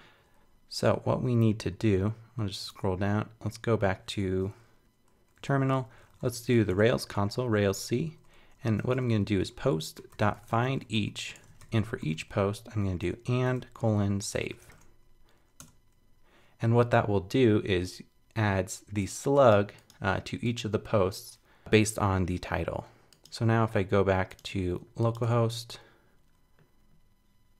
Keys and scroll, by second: 2.7 super+Tab, 5.5 super+k, 25.2 super+r.